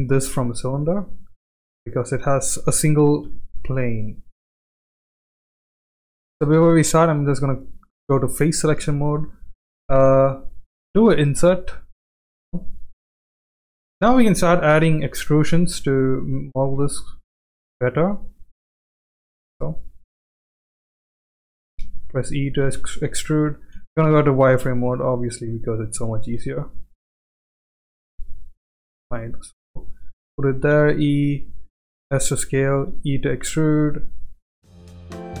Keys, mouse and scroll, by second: 1.8 middle click, 3.2 KP_1, 4.8 middle click, 5.8 shift+middle click, 7.2 3, 7.5 click, 10.9 i, 13.6 e, 16.7 s, 21.3 e, 22.7 ctrl+z, 23.7 z, 25.4 e, 26.3 s, 27.7 g, 30.6 e, 32.1 s, 32.8 e, 34.7 s, 35.3 e.